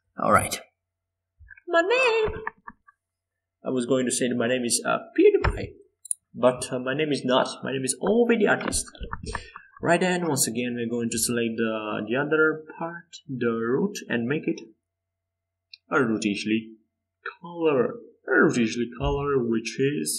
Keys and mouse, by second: 6.4-7.8 middle drag, 9.3 middle click, 10.1 Tab, 11.7 a, 13.4 z, 14.1 c.